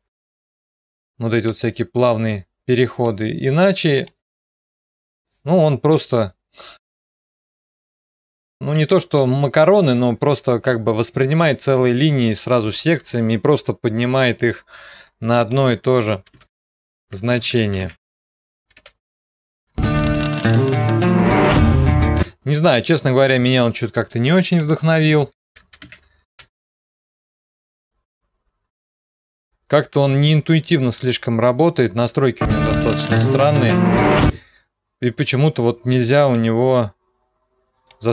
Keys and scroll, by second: 0.0-0.2 typing, 5.1 0, 5.2 Return, 16.3-19.9 typing, 22.4 0, 25.3-27.0 typing, 28.3 typing, 34.4 0.